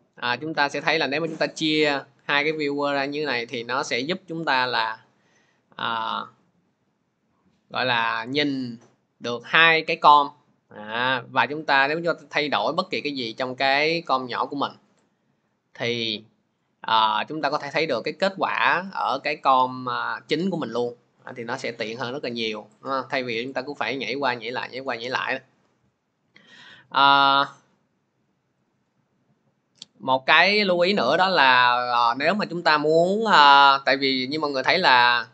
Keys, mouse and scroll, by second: 0.4 click, 12.1 click, 13.1 click, 14.2 click, 19.0 scroll, 19.7-20.5 scroll, 21.6 click, 22.6 click, 23.3 click, 24.7 scroll, 28.5 click, 32.9 click, 33.8 click, 34.7 click.